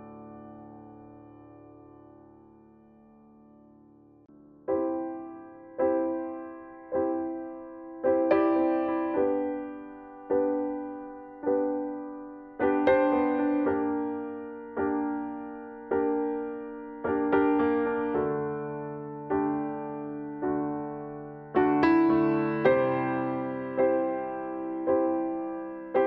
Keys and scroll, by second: 18.8 ctrl+t, 21.1 ctrl+t.